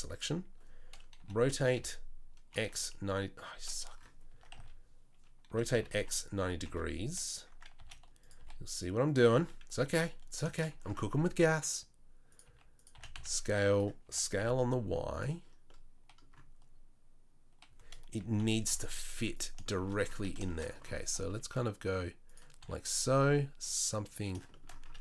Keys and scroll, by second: 1.2 r, 4.3 Tab, 4.5 a, 5.5 r, 6.6 KP_3, 7.7 s, 8.4 g, 9.8 s, 11.1 g, 12.4 s, 12.9 s, 14.0 s, 18.4 KP_3, 18.6 KP_1, 18.8 z, 21.0 g, 22.6 s.